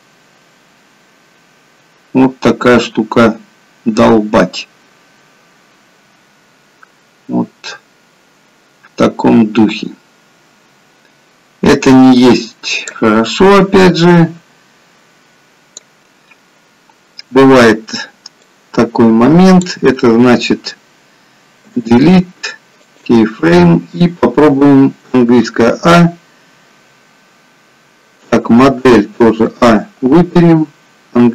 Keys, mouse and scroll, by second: 14.2 click, 18.6 click, 21.9 Delete, 25.4 a, 29.2 a.